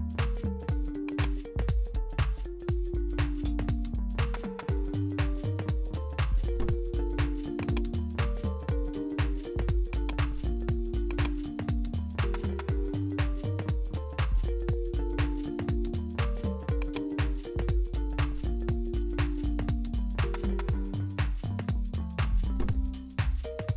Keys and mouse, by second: 0.1 s, 2.5-4.9 drag, 5.4 0, 7.6 click, 10.0 click, 11.1 click, 16.4-21.1 drag.